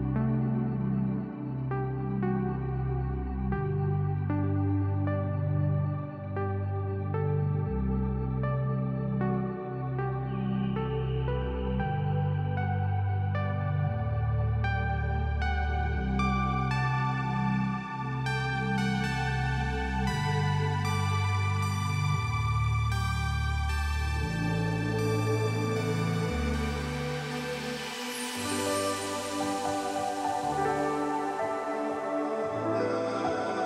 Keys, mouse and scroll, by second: 0.1 alt+scroll down 1, 0.7-1.5 drag, 3.0 ctrl+z, 3.9-6.8 drag, 12.1-16.9 drag, 23.5 F7, 24.2-26.5 drag.